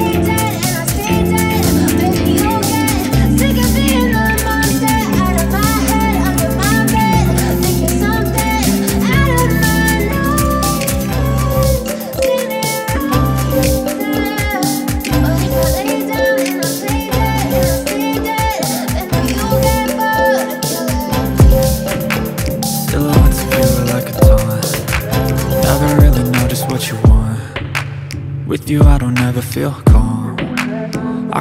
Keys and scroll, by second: 11.1 shift+a, 13.3 g, 14.7 0, 15.4 5, 15.5 Return, 19.5 3, 20.0 g, 20.2 z, 20.8 1, 23.2 g, 23.7 0, 25.0 2, 25.3 Return, 26.5 1, 26.6 0, 27.0 Return.